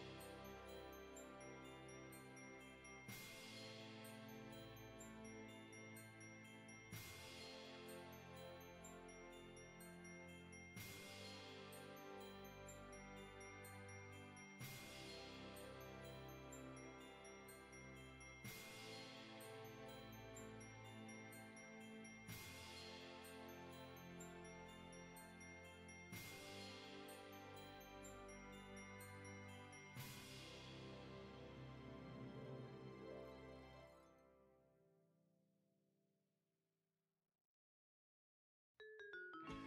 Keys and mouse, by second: 0.2 shift+click, 1.2 middle click, 3.2 shift+middle click, 4.4 shift+click, 5.4 shift+click, 6.3 shift+click, 6.8 shift+click, 7.6 shift+middle click, 8.3 shift+click, 9.0 middle click, 10.6 shift+click, 11.7 shift+click, 12.6 middle click, 14.0 shift+click, 14.6 middle click, 15.4 shift+middle click, 16.1 shift+click, 17.3 shift+click, 18.1 alt+z, 18.9 shift+click, 19.8 middle click, 20.7 middle click, 21.4 e, 23.9 click, 24.3 Tab, 24.7 right click, 25.1 click, 26.2 KP_1, 27.9 shift+middle click, 29.0 g, 29.6 click, 30.2 F6, 31.6 s, 32.5 click, 32.9 g, 33.9 click, 34.5 KP_3, 35.8 g, 36.8 click, 37.5 r, 39.0 click, 39.4 g.